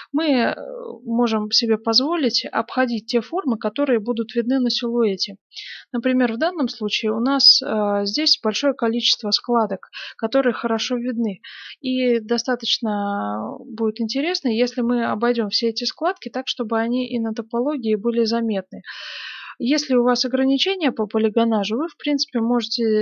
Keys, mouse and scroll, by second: 3.1-4.8 middle drag, 7.7-9.4 middle drag, 9.9-11.7 middle drag, 18.0-19.8 middle drag, 20.0 right click, 20.8-22.6 middle drag, 22.2 e.